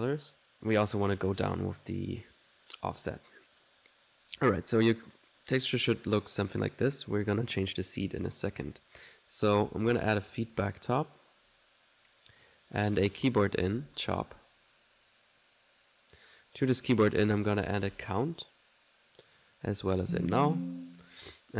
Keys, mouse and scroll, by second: 0.9 click, 1.8 middle click, 2.6 middle click, 6.5-7.7 drag, 8.0 click, 8.9 right click, 9.3-10.1 typing, 11.2 typing, 11.5 click, 12.0 click, 12.3 click, 13.1 click, 13.5-14.5 typing, 14.5 click, 15.4 click, 15.9 click, 16.9 right click, 17.3 c, 18.3-19.1 typing, 18.6 click, 19.2 click, 20.5 alt+click, 21.1 alt+n, 21.1 alt+click.